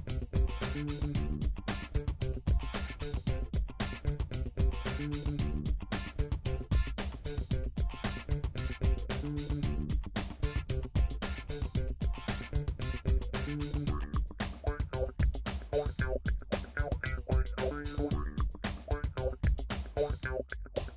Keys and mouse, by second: 0.3 g, 5.5 Tab, 6.6 click, 6.7-11.9 shift+middle drag, 7.4 Tab, 8.4 a, 9.2 alt+h, 9.5 a, 11.9 s, 15.6 Tab, 17.2-17.8 middle drag, 17.8 click, 17.9-20.9 middle drag.